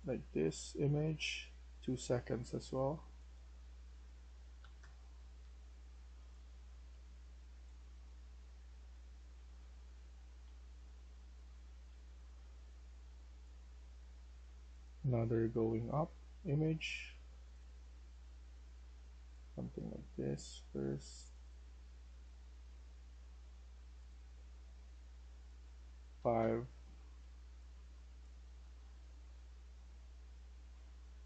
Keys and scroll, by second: 1.2-2.0 typing, 5.0-10.3 typing, 11.5-12.3 typing, 14.9 q, 17.8 w, 21.9-22.8 typing, 26.1-30.7 typing, 26.3 Return.